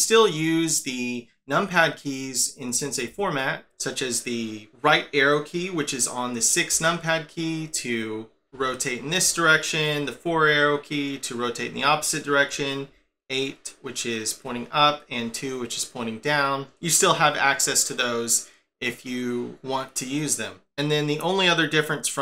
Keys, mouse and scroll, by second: 3.1-3.6 KP_6, 6.7-7.6 KP_6, 8.5-9.2 KP_6, 10.2-11.7 KP_4, 12.9-14.5 KP_8, 15.2-16.2 KP_2.